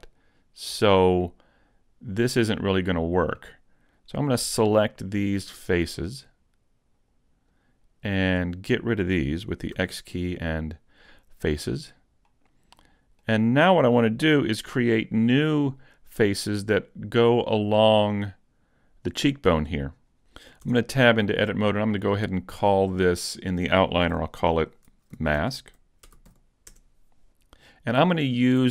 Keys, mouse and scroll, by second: 2.7 middle click, 4.2 right click, 4.8 shift+right click, 6.2 right click, 7.0 right click, 7.6 shift+right click, 8.0 shift+right click, 9.8 x, 12.3 middle click, 20.6 Tab, 23.0 click, 23.2 click.